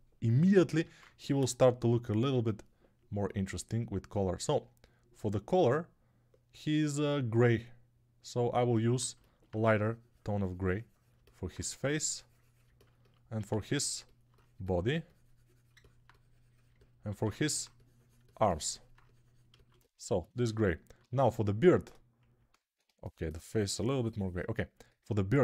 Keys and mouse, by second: 0.7 ctrl+Tab, 11.0-12.5 alt+drag, 13.3 alt+q, 20.9 alt+q.